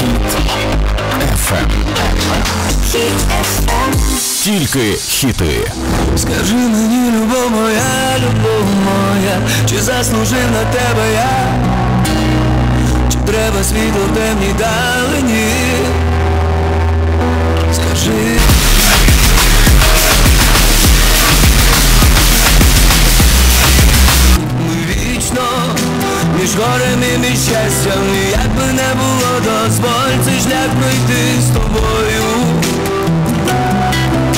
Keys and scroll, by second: 24.4 Page_Down.